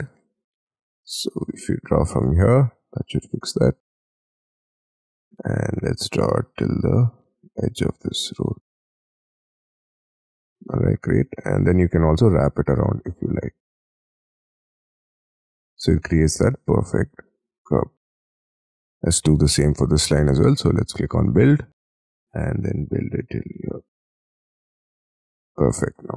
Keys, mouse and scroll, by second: 0.0 scroll down 1, 0.2 middle click, 0.6 shift+middle click, 1.3-1.7 scroll up 9, 3.0 shift+middle click, 3.4-4.0 shift+scroll up 15, 4.1 middle click, 4.6 middle click, 5.0-6.7 scroll down 39, 7.1 shift+middle click, 7.3 shift+scroll down 1, 7.5-9.5 scroll up 56, 9.5 middle click, 10.0 scroll up 1, 10.2 middle click, 10.6 middle click, 11.5 middle click, 11.5 scroll down 6, 13.7 space, 14.9-15.5 scroll up 11, 15.5 middle click, 16.2 middle click, 18.0-18.8 scroll down 18, 20.0-21.1 scroll up 9, 21.2 middle click, 21.7 scroll up 5, 22.0-23.0 scroll down 16, 23.0-23.9 scroll up 5, 23.9 scroll up 2, 24.0 middle click, 24.1 scroll down 6, 24.3-24.8 scroll up 10, 24.8 middle click, 25.1 middle click, 25.2 scroll down 16, 25.5 Escape, 25.7 middle click.